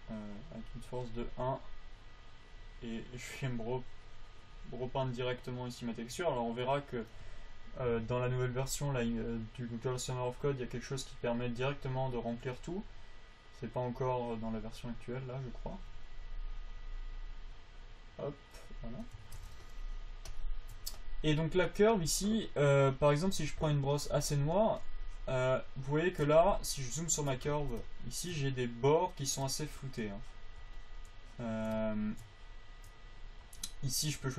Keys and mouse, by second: 2.1-3.9 drag, 21.4 click, 21.9 f, 23.6 f, 26.9 click, 30.8-34.3 drag.